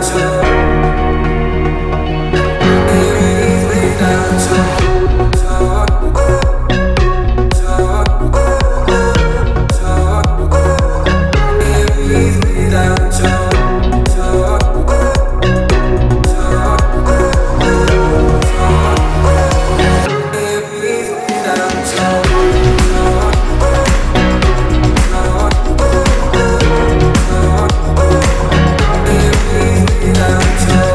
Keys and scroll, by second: 4.4 space, 5.1 t, 6.5 1, 6.7 Return, 6.9 space, 7.4 l, 8.5 space, 9.4 p, 10.7 space, 11.5 Delete, 13.7 Delete, 16.2 Delete, 18.8 h, 30.2 space.